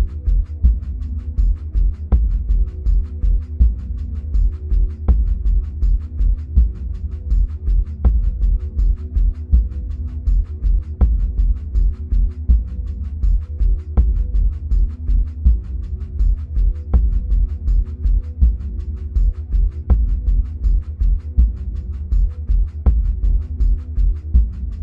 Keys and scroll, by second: 5.0-7.3 typing, 20.9-22.8 typing, 21.0 Right, 21.3 Right, 21.5 Right, 21.8 Right, 22.2 Right, 22.6 Right.